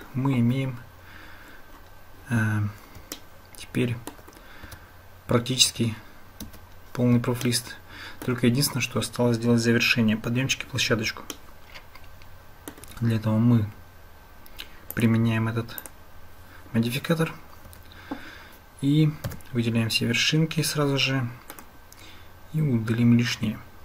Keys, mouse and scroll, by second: 0.4 Tab, 3.3 shift+click, 4.7 Tab, 7.4-8.3 shift+drag, 11.4-12.8 shift+drag, 14.9-15.9 drag, 17.7 Tab, 19.3 a, 21.6-23.8 drag.